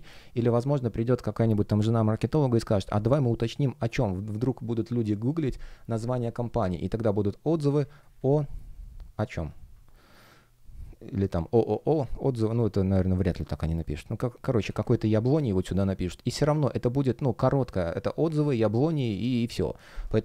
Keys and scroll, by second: 7.7 space, 14.6 space.